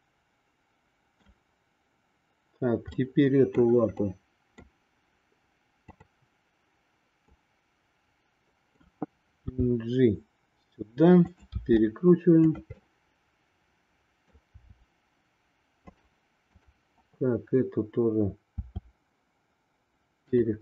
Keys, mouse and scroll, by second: 3.0 middle click, 4.0 middle click, 7.4-8.8 middle drag, 9.5 g, 11.5 r, 12.9-14.3 middle drag, 18.6 r.